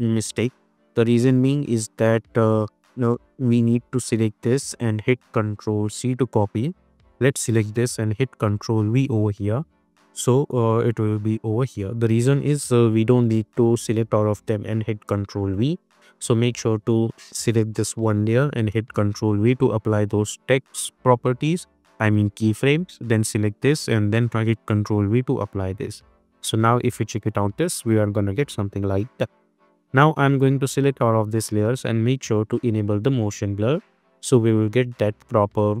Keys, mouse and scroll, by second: 0.8 click, 4.0-4.9 drag, 6.0 ctrl+c, 6.8 click, 8.2 ctrl+v, 9.1 space, 12.6-13.2 drag, 17.3 click, 18.8 ctrl+v, 23.1 click, 24.6 ctrl+v, 25.2 space, 26.9 click, 27.3 space, 30.5 ctrl+a, 32.4 click, 33.6 click, 33.8 space.